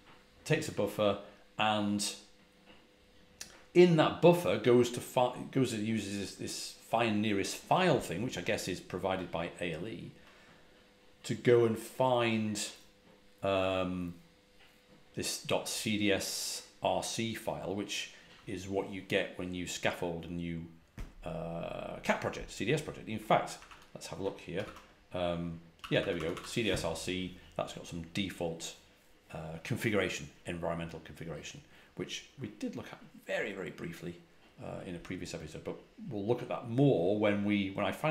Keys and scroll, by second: 23.5 ctrl+a, 23.6 ctrl+h, 24.5 r, 24.6 Return, 25.7-26.3 typing.